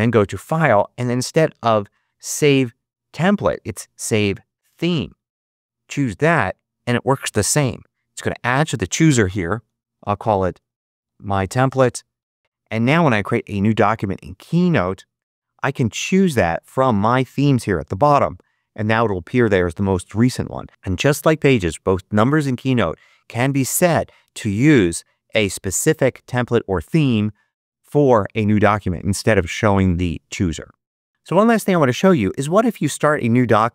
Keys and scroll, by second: 9.6-12.0 typing, 12.1 Return.